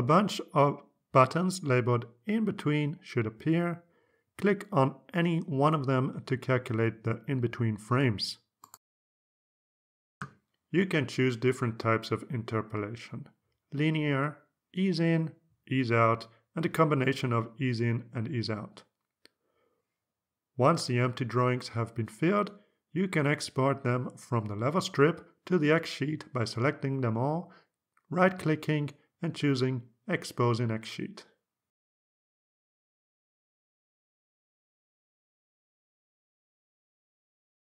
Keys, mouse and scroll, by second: 8.5 click, 10.9 click, 12.8 click, 20.3 click, 21.3-22.0 scroll up 1, 22.2-22.6 scroll down 1, 23.2 click, 23.7-24.4 scroll up 2, 24.6 click, 25.7 click, 26.7 ctrl+a, 27.3-29.3 ctrl+right drag, 30.9 click, 33.5 click, 35.5 click.